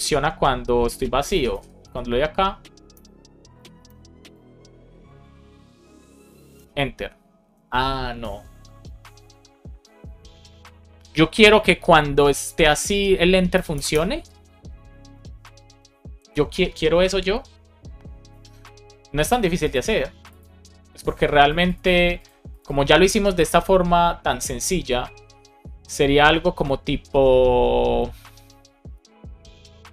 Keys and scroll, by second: 0.0 Return, 1.8 Escape, 3.0 Return, 6.4 Return, 13.5 Return.